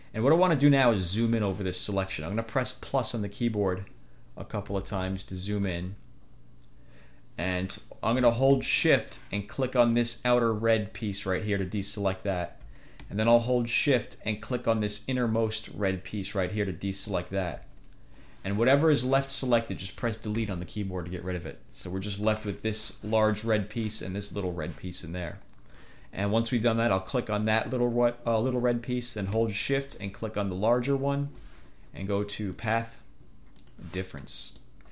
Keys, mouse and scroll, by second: 4.7 =, 6.4 scroll up 2, 11.6-12.0 shift+scroll up 1, 17.1 shift+click, 20.5 Delete, 27.5 click, 30.8 shift+click, 32.7 click, 33.7 click, 34.3 click.